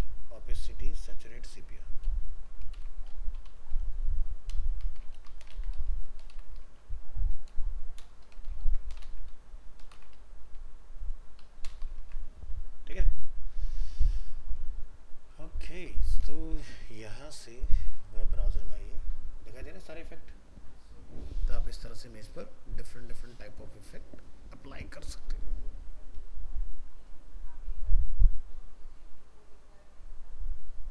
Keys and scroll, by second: 2.8 ctrl+shift+Left, 5.1 ctrl+c, 5.5 ctrl+v, 6.3 ctrl+shift+Left, 8.5 ctrl+Home, 8.6 ctrl+c, 9.0 ctrl+Return, 9.3 ctrl+v, 9.9 ctrl+shift+Left, 12.0 ctrl+s, 15.8 ctrl+s.